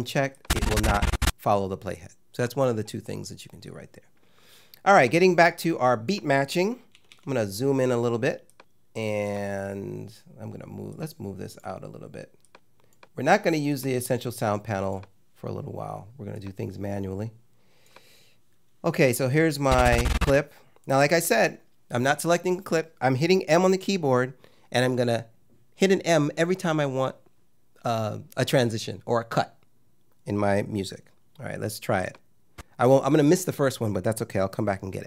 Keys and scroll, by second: 6.9 =.